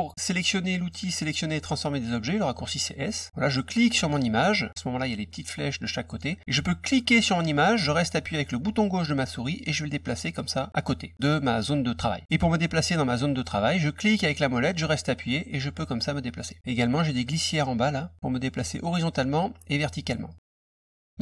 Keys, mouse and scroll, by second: 3.7 click, 6.9-11.9 drag, 14.1-16.6 middle drag, 17.3-18.8 drag, 20.2 click, 20.9 middle click.